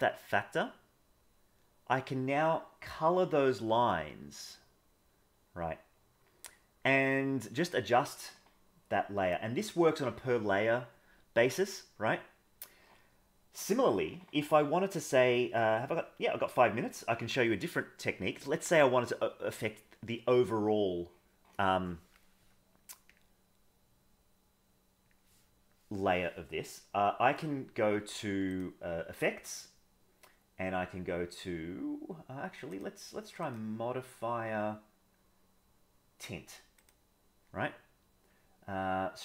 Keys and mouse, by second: 23.0-25.3 drag, 28.5 click, 29.5-32.3 drag, 33.4-37.0 drag.